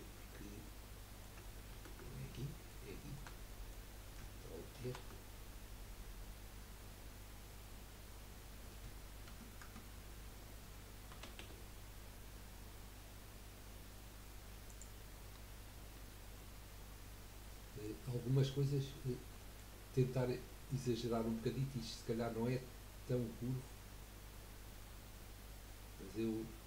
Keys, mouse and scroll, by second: 0.6-1.2 middle drag, 1.2-1.7 scroll down 1, 1.7 ctrl+z, 2.3-2.9 middle drag, 2.9-3.5 scroll up 1, 3.5-4.8 middle drag, 4.8 ctrl+r, 11.4 s, 16.4-18.7 middle drag, 18.7-19.1 scroll up 4, 19.4-20.6 shift+middle drag, 20.6 scroll up 2.